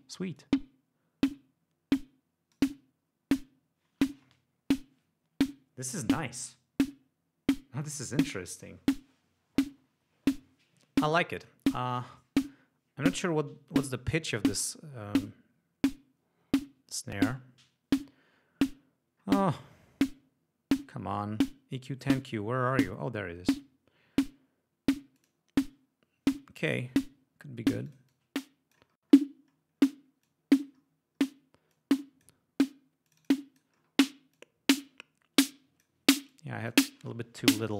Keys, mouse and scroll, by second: 0.5-2.9 drag, 12.0 right click, 14.1-14.6 scroll down 2, 17.3-17.7 scroll up 2, 17.8 scroll down 2, 19.3-19.8 scroll down 2, 23.6 click, 25.3 click, 27.8-29.0 drag, 29.0-29.4 scroll up 2, 29.5-30.0 scroll down 4, 30.3 click, 30.8 scroll down 2, 31.3 scroll up 2, 31.8-32.5 drag, 33.1-33.8 drag, 33.8 scroll down 2, 34.4-36.1 drag, 36.1 scroll down 2, 36.3-37.0 drag.